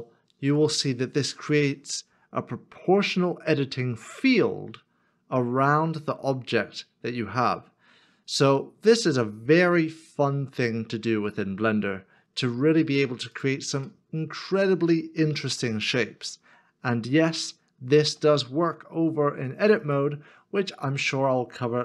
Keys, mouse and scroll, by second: 0.3-1.3 scroll up 1, 1.3-2.2 scroll up 1, 2.2-2.7 scroll up 1, 2.7 scroll up 1, 3.0-4.8 scroll down 1, 4.8-5.4 scroll down 1, 5.4-6.0 scroll down 1, 6.0-8.1 scroll up 1, 13.9-15.2 scroll up 1, 16.0 ctrl+z, 16.8 scroll up 1, 18.0 shift+middle click.